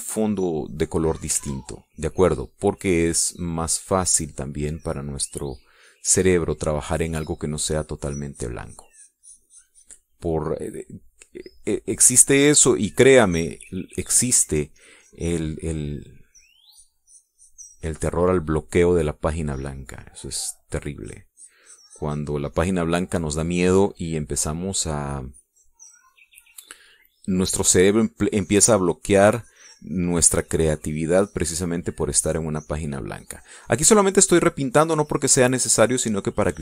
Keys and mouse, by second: 1.3-2.5 drag, 2.8 ctrl+z, 3.4 ctrl+click, 4.3-5.6 drag, 5.7-7.6 drag, 7.7 middle click, 8.8-11.6 drag, 11.8 middle click, 12.8-15.4 drag, 15.6-17.3 drag, 17.8-20.0 drag, 20.2 middle click, 21.1 click, 22.4-24.4 drag, 24.7 middle click, 25.6 click, 26.0-28.8 drag, 29.2-33.4 drag, 34.2-36.6 drag.